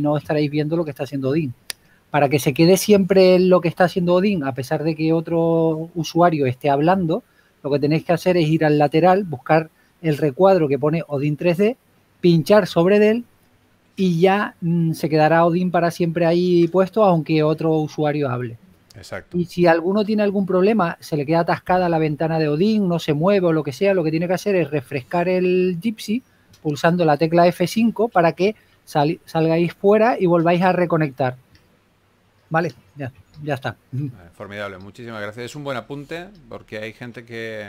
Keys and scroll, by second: 0.2 s, 5.9-7.9 typing, 12.5 3, 16.9 s, 18.7-19.7 typing, 33.9 s, 35.9 s.